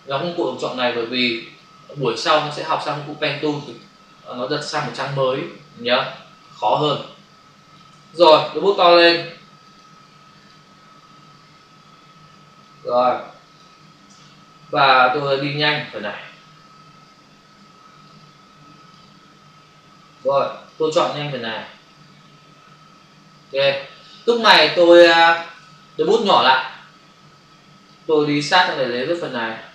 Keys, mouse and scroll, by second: 1.0 click, 3.6 space, 9.6 click, 10.4 double click, 11.7 ], 12.2 space, 14.8 click, 16.6 ctrl+-, 17.6 space, 20.7 click, 24.7 ctrl+click, 26.7 [, 27.9 click.